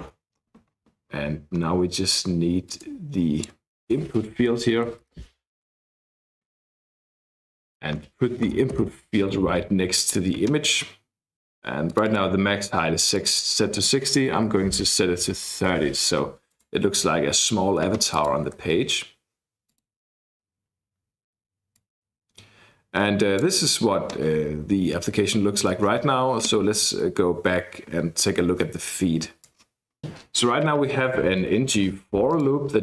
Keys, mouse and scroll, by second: 0.0 Return, 0.3-1.5 scroll down 2, 1.5-2.3 scroll up 2, 2.6-3.7 drag, 4.7 ctrl+c, 5.7-7.1 scroll up 2, 7.6 click, 8.5 Return, 8.8 ctrl+v, 9.9 click, 11.8 click, 13.0 click, 14.1 3, 15.5 BackSpace, 15.7 0, 16.5 click, 18.1 click, 19.9 click, 21.7-23.7 drag, 29.4 click, 32.3 click.